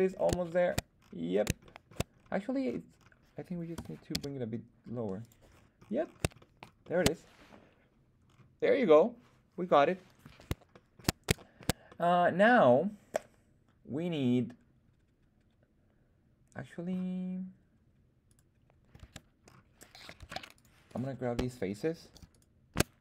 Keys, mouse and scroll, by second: 0.4 shift+middle drag, 0.9-1.6 scroll up 3, 1.6-2.5 shift+scroll down 2, 1.6-1.9 shift+middle drag, 2.5-3.1 scroll up 2, 3.7 g, 4.0 z, 5.1 click, 5.4-6.3 scroll down 5, 6.3 shift+middle click, 6.7 shift+middle click, 8.2-9.1 scroll up 1, 10.6 shift+middle click, 11.3 shift+middle drag, 11.8-17.1 middle drag, 18.2 click, 18.2 right click, 18.9 Tab, 19.3-20.0 scroll up 2, 20.1 ctrl+Tab, 20.8 click, 20.8 right click, 22.2 alt+shift+right click.